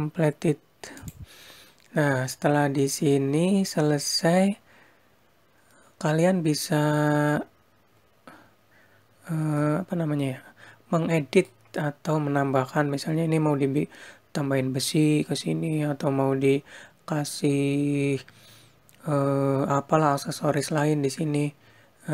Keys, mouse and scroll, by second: 0.9 click, 5.9 scroll down 1, 6.7-7.3 scroll up 1, 9.6 middle click, 11.8-12.4 scroll down 1, 12.6 scroll up 1.